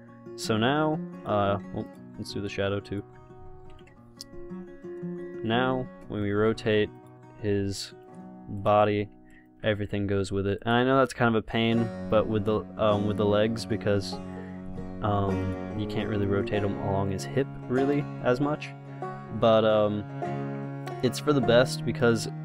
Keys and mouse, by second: 4.0 ctrl+p, 5.9 r, 6.8 ctrl+z, 7.6 r, 9.1 r, 10.0 ctrl+z, 11.2 r, 12.7 ctrl+z, 14.0 r, 15.2 ctrl+z, 16.1-17.3 drag, 16.1 r, 18.3 ctrl+z.